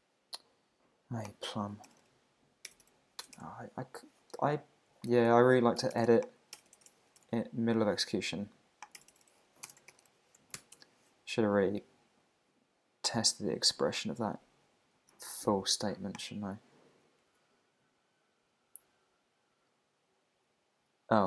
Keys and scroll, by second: 7.2 super+Tab, 9.7 Tab, 9.9 shift+7, 10.6 super+s, 10.7 super+Tab, 15.0 super+c, 16.8 super+v, 17.3 Return.